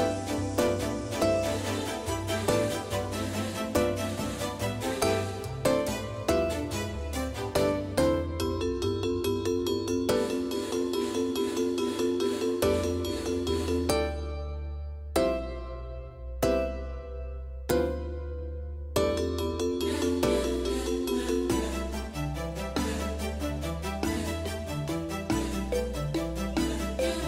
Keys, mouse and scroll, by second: 2.9-5.2 drag, 7.4 s, 10.0-13.0 drag, 18.1 ctrl+z, 26.4-27.2 drag.